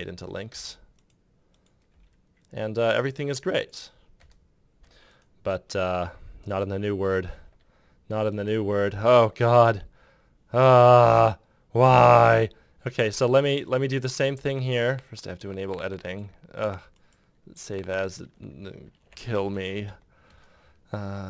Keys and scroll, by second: 0.3 Return, 1.7 Delete, 3.9 Delete, 4.0 Return, 19.0 m, 19.3 space, 19.6 m, 20.0 Return.